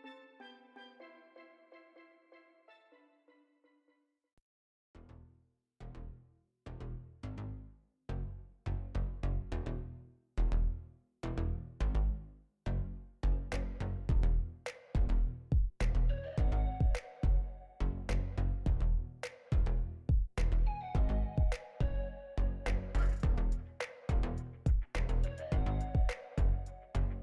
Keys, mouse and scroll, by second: 0.2 alt+right click, 0.5 alt+right click, 1.6 scroll up 4, 2.3 scroll down 5, 2.5 alt+right click, 2.9 shift+a, 7.0 shift+a, 8.9 click, 9.9-10.9 scroll up 3, 10.3 click, 12.1 click, 13.6 click, 14.9 click, 18.3 click, 19.6-20.2 scroll up 9, 20.2 click, 21.3 scroll down 5, 21.6 alt+right click.